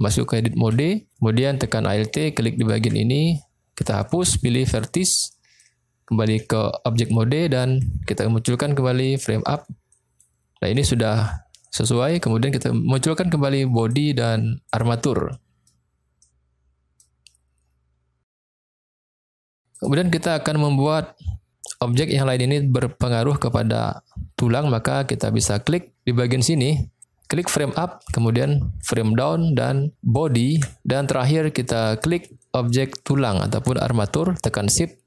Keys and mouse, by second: 0.6 Tab, 2.6 alt+click, 3.8 x, 5.4 middle click, 6.3 Tab, 7.7 middle click, 8.9 click, 9.9 middle click, 10.7-11.1 middle drag, 11.5 middle click, 13.7 click, 14.6 click, 15.2-15.7 middle drag, 16.2-17.0 middle drag, 19.8 click, 26.5 click, 27.6 click, 28.8 shift+click, 30.2 shift+click, 31.3-31.8 middle drag, 32.3 middle click.